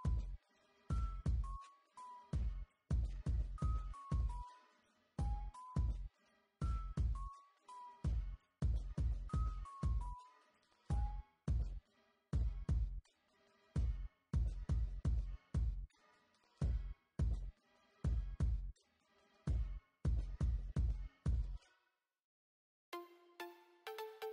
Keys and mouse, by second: 0.0 ctrl+r, 0.2 ctrl+r, 0.6 ctrl+r, 4.5 ctrl+t, 5.2 ctrl+z, 5.3 ctrl+z, 5.6 ctrl+r, 7.7-8.7 drag, 8.7 Tab, 10.0 KP_1, 10.2 z, 10.8 Tab, 11.0 ctrl+r, 11.9 b, 13.3 z, 13.6 Tab, 16.1 click, 16.3 ctrl+z, 16.6 KP_1, 17.1 Tab, 19.1 shift+a, 19.6 shift+a, 20.1 g, 21.4 Tab, 23.9 middle click.